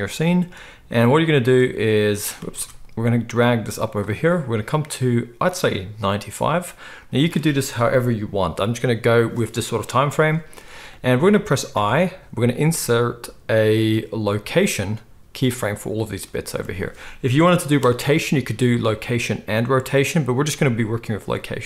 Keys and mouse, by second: 2.6 ctrl+z.